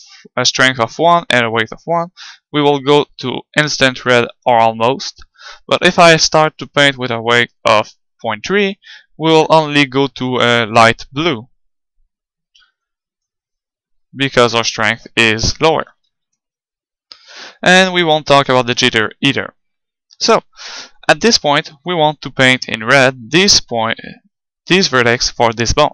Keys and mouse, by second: 1.9-3.7 drag, 6.3-8.1 drag, 8.9-10.7 drag, 13.5 middle click, 15.4 ctrl+z, 15.7 ctrl+z, 15.9 ctrl+z.